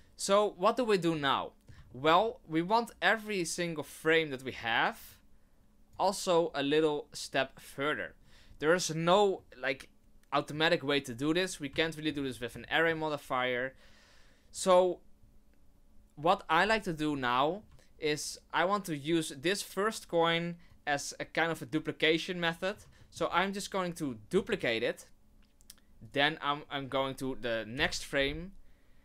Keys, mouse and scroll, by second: 1.2 middle click, 1.9 shift+middle click, 4.1 right click, 5.1 click, 9.3 middle click, 11.8 shift+middle click, 12.2 scroll up 1, 12.7 shift+middle click, 17.4 scroll down 1, 20.7 click, 22.5 scroll up 1, 23.0 shift+middle click, 24.3 shift+d, 27.7 Right.